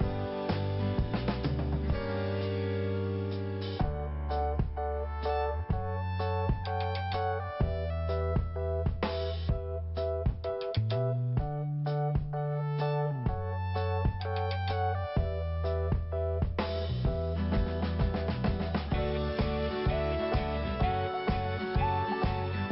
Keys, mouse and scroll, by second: 0.4-0.9 scroll up 1, 2.4 click, 4.1 click, 4.9 scroll down 1, 6.2 scroll up 1, 7.4 t, 8.0 scroll down 2, 9.0 scroll up 2, 10.3 click, 11.8 click, 14.1 scroll down 1, 15.2 click, 16.6 click, 18.2-18.6 scroll down 1, 19.2 scroll up 1, 20.3 click, 22.0 click.